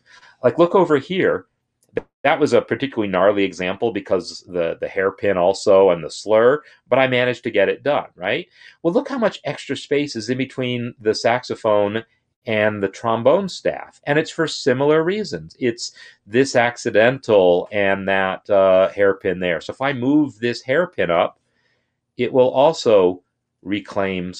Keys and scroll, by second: 21.7 Up, 22.1 Up, 22.3 Up, 22.4-23.5 Up.